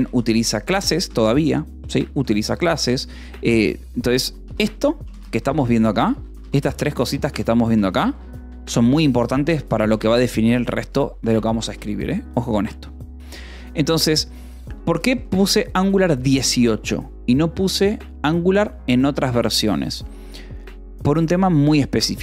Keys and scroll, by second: 0.0-2.4 typing, 1.5 ctrl+s, 3.5-6.6 typing, 8.5 Escape, 9.2 j, 9.5 o, 9.8 Return, 14.9 k, 16.3 e.